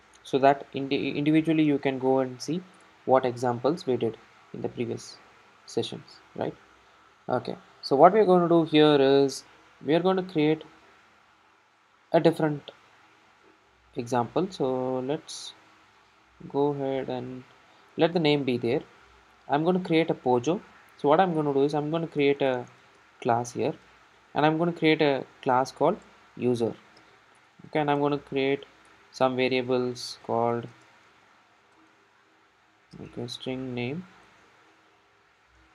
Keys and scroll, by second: 5.2 ctrl+shift+super+F12, 28.9 Return.